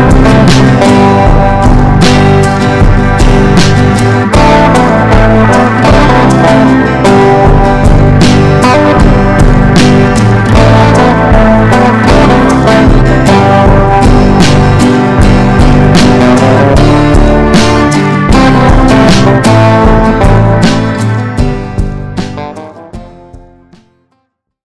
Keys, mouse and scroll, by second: 6.1 click.